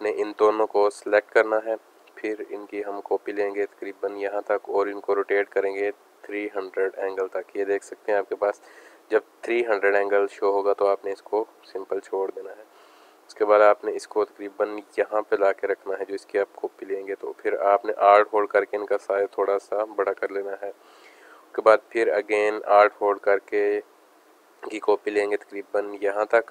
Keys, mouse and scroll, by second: 2.4 click, 4.8 click, 11.9-16.0 drag, 17.1 click, 20.2 space, 20.3 click, 20.7 space, 22.1 click.